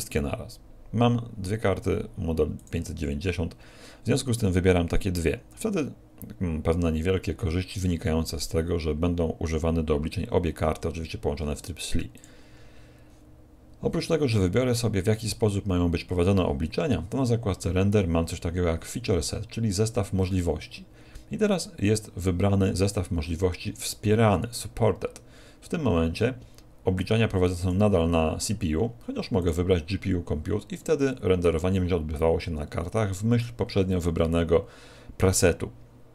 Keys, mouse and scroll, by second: 27.6 click.